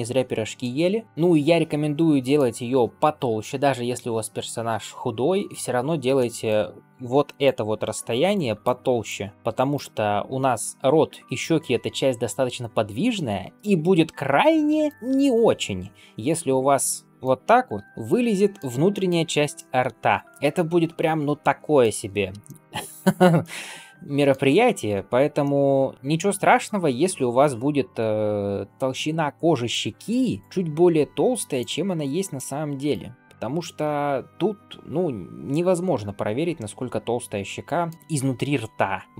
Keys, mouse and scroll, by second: 0.5-2.2 middle drag, 6.0 middle click, 7.0 d, 7.3 click, 8.2 d, 8.5 click, 8.9-9.3 d, 9.3 click, 9.6 d, 9.7 d, 14.7 right click, 14.9 d, 16.7 middle click, 17.6 g, 17.8 middle click, 18.8 shift+middle click, 19.2 scroll up 2, 19.4-21.7 middle drag, 21.9 scroll down 1, 22.3 shift+middle click, 22.7 scroll up 1, 23.3 middle click, 24.8 ctrl+z, 25.3-29.6 middle drag, 29.8 scroll up 1, 30.4-31.5 drag, 30.4 d, 31.5-33.2 typing, 31.9 click, 32.8 right click, 33.6 scroll up 1, 33.7-37.8 middle drag, 37.9-38.5 scroll down 1.